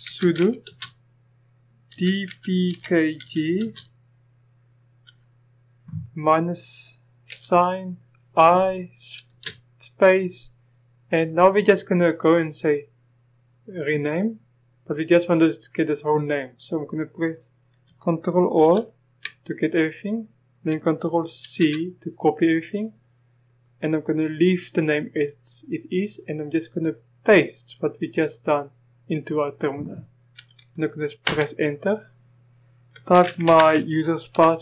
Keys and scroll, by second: 0.0-0.6 typing, 1.9-3.6 typing, 5.0 typing, 7.3 typing, 9.3 typing, 18.6 ctrl+a, 21.4 ctrl+c, 31.2 Return, 32.9-33.8 typing, 34.4 Return.